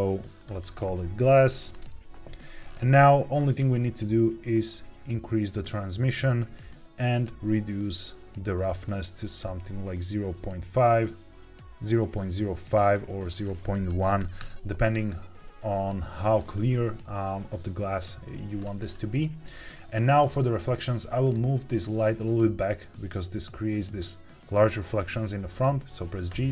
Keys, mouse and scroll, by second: 0.3-1.7 drag, 1.5 s, 2.5-3.2 scroll down 3, 3.2 scroll down 2, 4.6-5.6 drag, 7.0-12.8 drag, 13.2-14.3 drag, 18.5-19.6 scroll down 3, 19.6-21.1 scroll up 2, 21.1 click, 26.4 g.